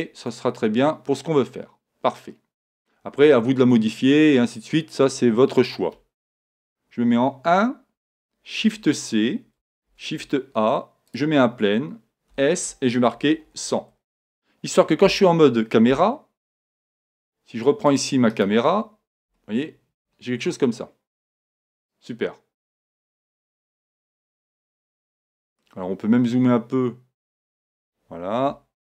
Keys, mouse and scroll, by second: 0.3-2.1 middle drag, 3.4-5.6 middle drag, 6.5 KP_1, 8.6 shift+c, 9.9 shift+a, 12.3 s, 15.0 KP_1, 15.9 KP_0, 17.9-19.6 drag, 18.3-20.0 right drag, 19.3 g, 21.9-23.8 drag, 25.2 g, 28.5 KP_1.